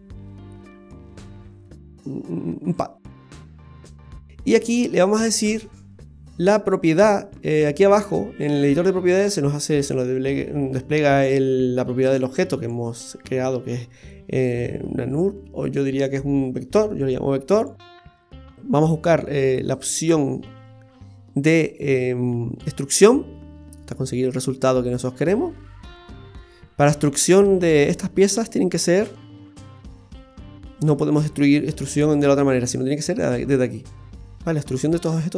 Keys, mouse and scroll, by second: 4.1 middle click, 5.4-6.3 scroll up 1, 12.0 click, 17.1 middle click, 17.5 middle click, 17.8 middle click, 18.5 click, 21.6 click, 23.0 click, 23.4-23.7 scroll up 3, 23.7 middle click, 24.4 shift+middle click, 26.0-26.5 scroll up 3, 26.5 middle click, 28.4 click, 29.6 click, 33.8 click.